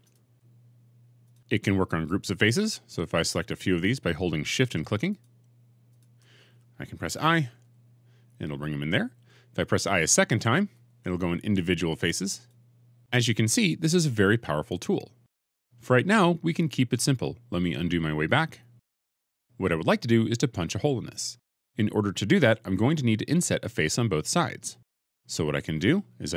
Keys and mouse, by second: 0.3 i, 1.1 click, 2.7 click, 3.4 shift+click, 5.0 shift+click, 5.8 shift+click, 7.5 i, 10.6 i, 12.2 click, 18.7-19.4 ctrl+z, 25.7-26.3 middle drag.